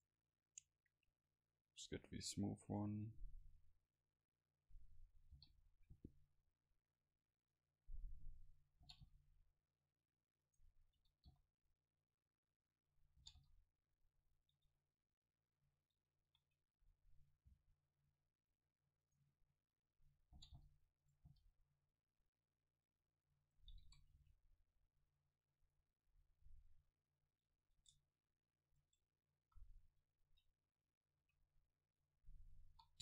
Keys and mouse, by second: 0.2-1.2 right drag, 3.9-5.8 drag, 5.4 o, 6.4-8.2 drag, 11.0 s, 13.3 s, 13.3 g, 14.6 Tab, 15.3-16.5 drag, 16.0 Tab, 16.4 a, 17.6 c, 19.2 click, 19.5-21.1 drag, 20.4 g, 21.3 g, 23.1-25.3 drag, 23.9 a, 24.2 c, 26.1 middle click, 26.5 g, 27.9 Tab, 28.9 Tab, 29.6 a, 30.3 v, 32.1-33.0 right drag, 32.8 s.